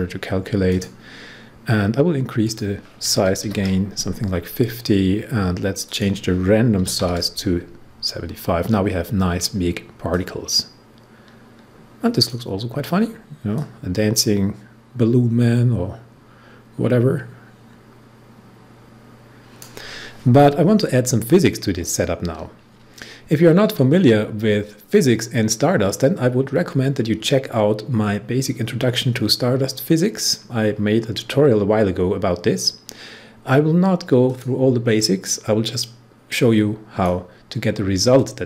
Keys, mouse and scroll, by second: 0.6 click, 3.0-3.4 typing, 5.8 click, 6.5-7.4 typing, 8.6 scroll up 1, 10.0-12.6 drag, 12.6-13.5 scroll down 1, 13.5-22.1 drag, 34.2 click, 34.5-38.4 drag.